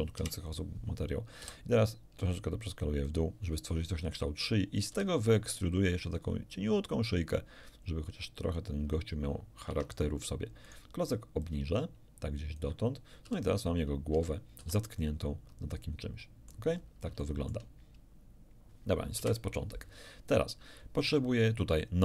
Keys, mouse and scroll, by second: 0.2 KP_1, 1.4 s, 3.0 click, 4.9 e, 8.6 ctrl+click, 9.7 Tab, 10.6 right click, 11.4-12.8 drag, 13.2 ctrl+r, 14.1 Escape, 14.6 z, 15.0-16.7 middle drag, 16.7 scroll down 2, 17.2 shift+middle click, 19.2 KP_1.